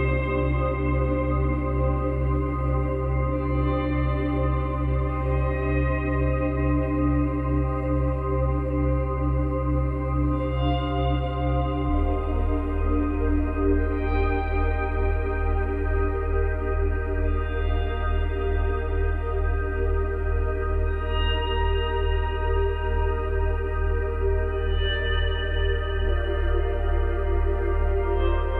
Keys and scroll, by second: 2.0 space, 3.0 space, 4.6 space, 18.7 space.